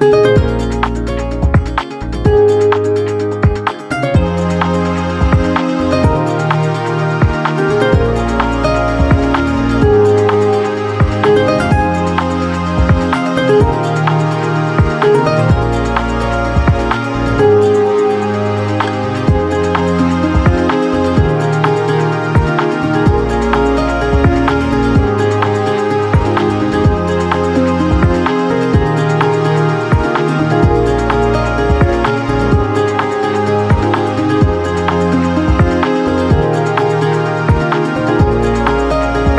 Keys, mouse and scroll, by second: 1.4 ctrl+shift+i, 5.3 click, 9.3-17.8 drag, 18.5-29.1 drag, 31.8-36.3 drag, 37.6-39.3 drag.